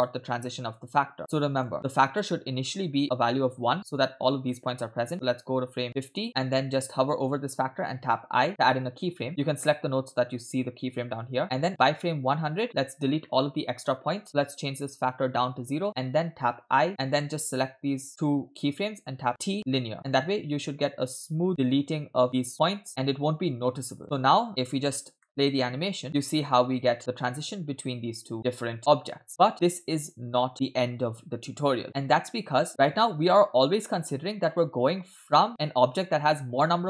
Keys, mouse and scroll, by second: 1.2 click, 1.9-3.1 drag, 5.3 click, 8.0 i, 9.3 click, 11.7 click, 13.2-14.0 shift+middle drag, 14.8-15.8 drag, 16.7 i, 17.1 click, 19.1 t, 19.3 t, 20.7-24.0 drag, 24.0 scroll down 3, 25.2-25.6 shift+middle drag, 26.0 space, 29.3 space, 29.4 space, 32.3 space, 32.7 space, 33.7-35.5 drag.